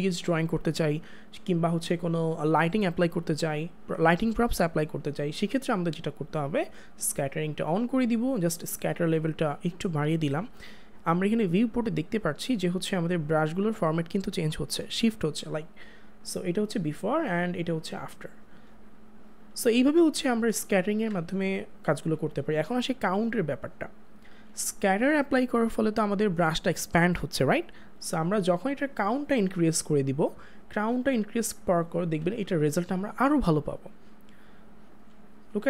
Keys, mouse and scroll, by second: 7.6 click, 13.4 click, 20.6 click, 21.1 ctrl+z, 28.9 ctrl+z.